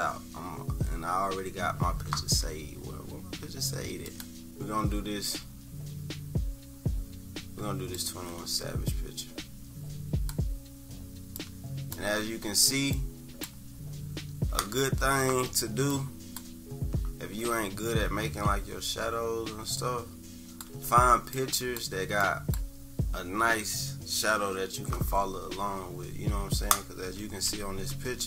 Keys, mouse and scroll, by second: 4.1 click, 7.9-10.3 drag, 11.4 click, 12.9 click, 15.9 click, 19.7 shift+click, 21.4 click, 22.4 click.